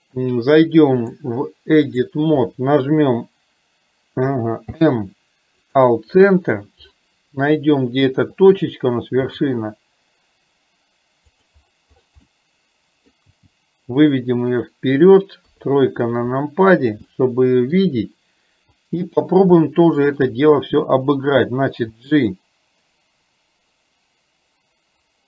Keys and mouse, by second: 1.0-2.2 drag, 4.7 m, 12.3 middle click, 15.5 KP_3, 17.3 middle click, 19.8 shift+middle click.